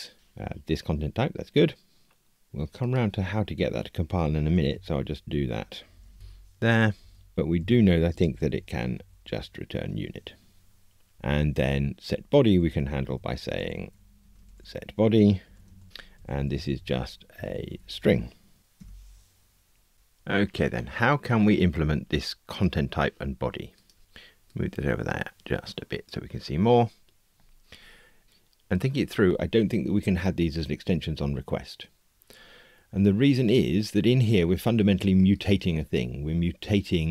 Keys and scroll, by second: 9.8 Escape, 11.1 super+d, 13.5 alt+shift+Right, 16.2 alt+shift+Right, 17.3 alt+shift+Left, 18.7 Tab.